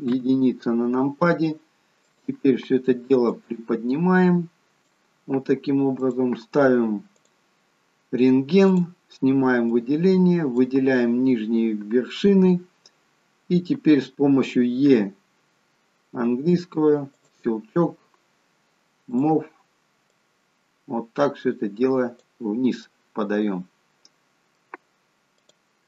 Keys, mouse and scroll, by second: 0.0 KP_1, 2.0 click, 3.2 click, 7.2 click, 8.6 click, 19.0 click, 20.0 click, 22.7 middle click, 25.4 click.